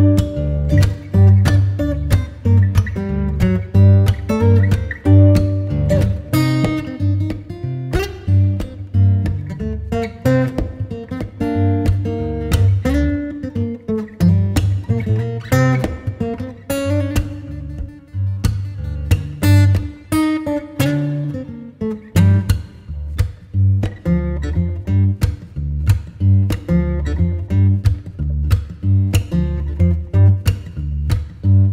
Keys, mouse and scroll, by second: 0.8 Return, 1.0 click, 1.2 Tab, 1.5-1.8 scroll down 1, 1.8-4.9 right drag, 4.9-5.5 scroll up 1, 5.5-5.8 scroll down 1, 5.8 Tab, 7.0 click, 7.6 ctrl+k, 8.3-9.4 scroll down 1, 10.0 click, 11.9 right click, 12.2 scroll down 1, 12.4-12.7 scroll up 1, 12.7 right click, 13.8 Tab, 15.4 scroll up 1, 15.8 ctrl+shift+click, 18.9 Delete, 19.0-19.3 scroll down 1, 19.3 right click, 19.7 Tab, 21.7 scroll down 1, 21.8 scroll up 1, 23.1 ctrl+shift+click, 23.6-23.9 scroll up 1, 25.5 click, 25.8 scroll down 1, 26.0 scroll up 1, 26.9 ctrl+shift+click, 28.0 ctrl+r, 28.8 click, 29.1-29.6 scroll down 1, 29.6 right click, 30.2 Tab.